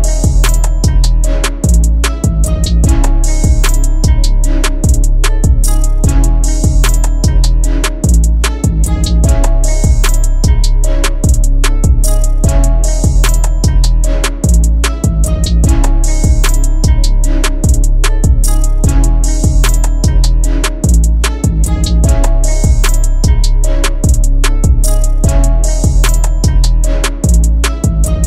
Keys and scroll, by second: 12.1 1, 12.5 Return, 13.8 KP_Add, 17.5 ctrl+z, 18.6 KP_Add, 27.7 c, 28.1 F3.